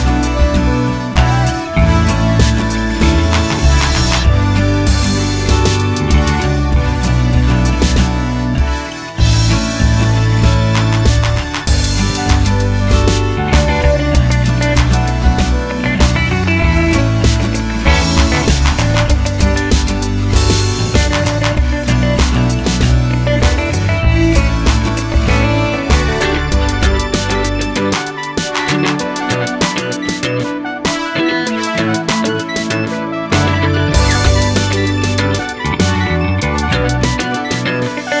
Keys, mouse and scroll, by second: 0.2 middle click, 1.1 click, 1.3 KP_Decimal, 1.6-3.2 middle drag, 1.8 scroll down 2, 2.1-3.2 scroll up 2, 3.2 click, 4.2 click, 4.3 middle click, 5.7 click, 6.0 middle click, 6.8 click, 7.9 click, 8.9 click, 9.4-9.8 scroll down 2, 9.8-11.4 middle drag, 11.4 click, 11.5 scroll up 1, 11.7 Tab, 12.7 click, 13.2 shift+click, 16.3-22.0 middle drag, 16.8 ctrl+KP_Add, 18.3 ctrl+KP_Add, 22.0 click, 23.5 click, 26.7 click, 27.2-28.6 drag, 27.9 Return, 30.1 click, 31.4-32.0 drag, 33.4 KP_Enter, 33.4-34.4 drag, 36.1-38.2 middle drag, 36.2 scroll down 2.